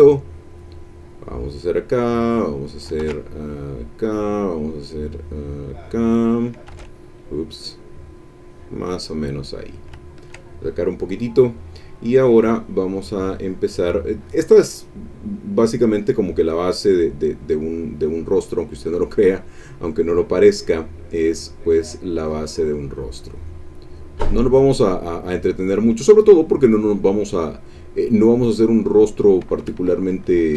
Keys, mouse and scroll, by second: 0.1-1.9 drag, 2.1 click, 3.0 ctrl+z, 3.3 ctrl+click, 4.5 click, 4.9 click, 6.7 ctrl+z, 7.2-9.1 ctrl+drag, 9.1 click, 9.7 click, 10.1 ctrl+click, 10.6 ctrl+click, 18.8 click, 19.7-22.4 drag, 22.8-25.4 drag, 28.2-29.4 drag, 29.8 ctrl+z.